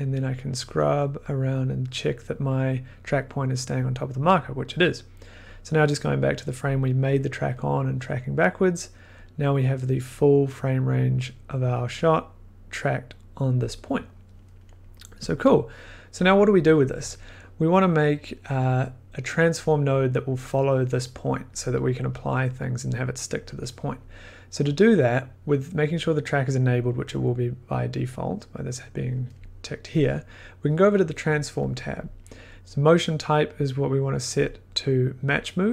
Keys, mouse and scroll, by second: 5.4-8.4 drag, 10.9-13.5 drag, 13.8-14.3 drag, 15.3 click, 15.4 scroll, 15.9 middle click, 17.7 scroll, 31.6 click, 32.5 click, 34.4 click.